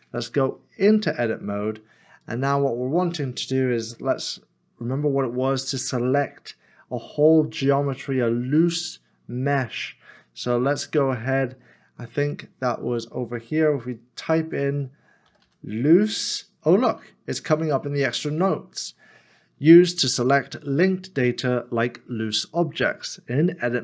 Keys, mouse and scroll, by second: 0.7 Tab, 15.3 l, 15.4 o, 15.9 s.